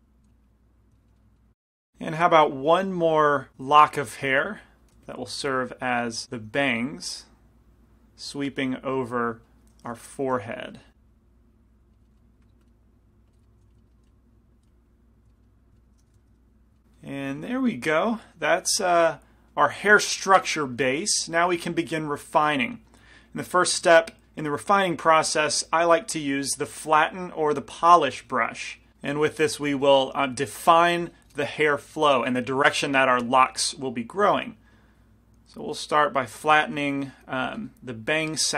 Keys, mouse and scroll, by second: 0.3 f, 1.0 middle click, 2.4-3.5 drag, 3.7 f, 4.1-7.3 middle drag, 4.5 f, 5.2 f, 5.3-6.6 drag, 5.3-6.6 right drag, 6.5 f, 7.3-9.7 drag, 8.9 middle click, 8.9 right click, 10.4 g, 10.5 f, 11.2-12.3 drag, 11.2 middle click, 11.2 right click, 12.0 right click, 12.3 middle click, 12.7 click, 12.7 right click, 13.5 middle click, 13.7 f, 14.1 f, 14.4-15.9 drag, 14.4 right click, 14.7 f, 15.4 right click, 15.9 middle click, 16.4 g, 16.5 click, 26.1-28.0 drag, 29.8 f, 30.8 f, 34.4 f, 35.1-37.6 drag, 36.8 shift+f.